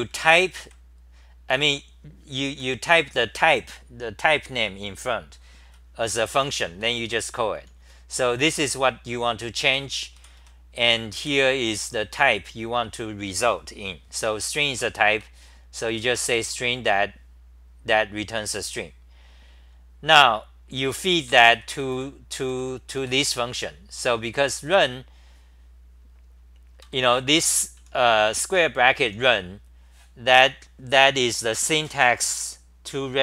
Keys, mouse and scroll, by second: 0.0-0.6 typing, 2.5 h, 2.9 n, 7.6 ctrl+g, 7.6 n, 7.8 n, 8.4 9, 9.7 ctrl+g, 10.4 g, 15.1 ctrl+g, 15.1-16.9 typing, 21.5 ctrl+g, 22.1-23.6 typing, 26.6-29.2 typing.